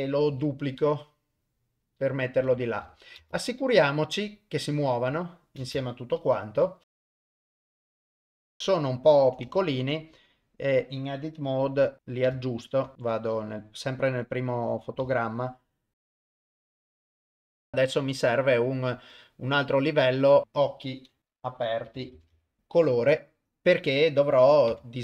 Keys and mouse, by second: 0.3 shift+d, 2.4 Tab, 3.2 shift+space, 5.6 shift+space, 6.4 shift+Left, 7.0 click, 7.3 ctrl+z, 7.3 click, 7.7 click, 8.0 ctrl+middle click, 8.1 shift+space, 8.5 shift+space, 9.3 ctrl+middle click, 9.4 Tab, 11.7 l, 12.5 ctrl+middle click, 12.9 shift+Left, 14.1 click, 15.2-15.9 ctrl+right drag, 16.1 ctrl+drag, 16.3 s, 16.8 ctrl+right click, 17.0 alt+a, 17.0 ctrl+right drag, 17.3 g, 17.7 drag, 19.8 click, 20.4-22.6 drag, 20.4 middle click, 21.2 c, 21.2 BackSpace, 22.6 BackSpace, 24.7 Tab.